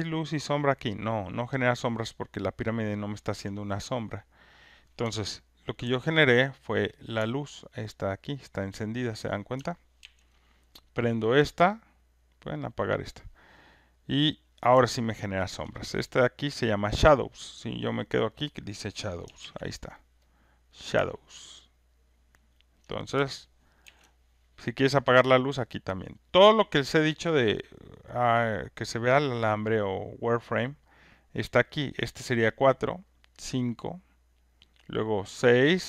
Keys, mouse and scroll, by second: 1.7 alt+click, 5.8 ctrl+F1, 5.9 click, 6.5 click, 8.8 click, 10.0 ctrl+F1, 11.3 click, 12.4 click, 15.6 alt+click, 15.7 alt+click, 19.4 ctrl+F1, 20.3 click, 22.8 ctrl+click, 23.8 ctrl+F1, 25.0 click, 25.9 click, 26.0 ctrl+click, 28.0 click, 29.0 click, 31.3 click, 33.3 click.